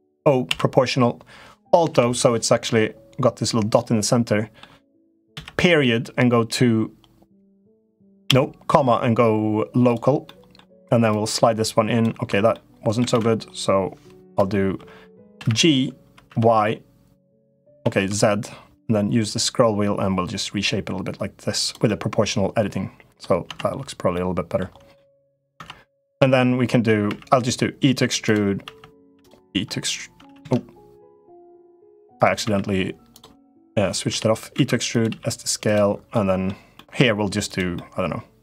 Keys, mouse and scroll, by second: 0.3 o, 1.7 alt+o, 3.5 middle click, 10.0 middle click, 10.8 click, 12.2 right click, 12.9 ctrl+z, 15.1 g, 21.7-23.0 middle drag, 23.2 Tab, 23.9 middle click, 24.7 middle click, 25.3 Tab, 26.8 e, 28.4 e, 30.0 ctrl+z, 30.2 ctrl+z, 31.6 g, 32.2 e, 33.9 o, 34.3 e, 34.8 s, 36.0 middle click, 36.6 middle click, 37.3 click, 37.5-38.4 middle drag.